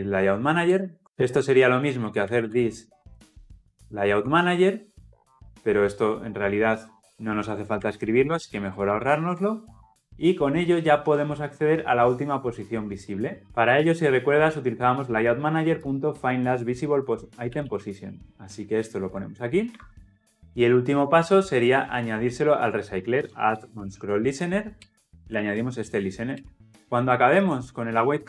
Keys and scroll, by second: 1.0 ctrl+z, 3.6 Return, 5.2 Escape, 8.0 Escape, 8.3 ctrl+z, 8.8 ctrl+z, 17.5 ctrl+c, 19.8 ctrl+v, 24.8 Return.